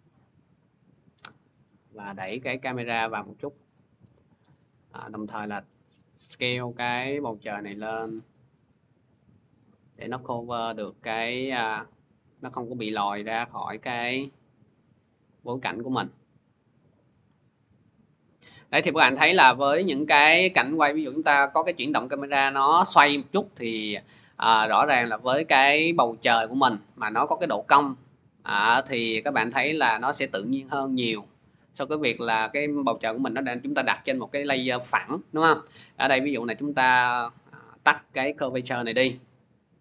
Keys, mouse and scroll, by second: 3.4 shift+click, 4.7 click, 10.0 click, 15.5 click, 17.4 click, 18.3 click, 18.9 click, 20.1 click, 22.6 middle click, 22.7 scroll, 32.0 click, 36.1 click, 37.6 click, 38.3 0, 38.9 click.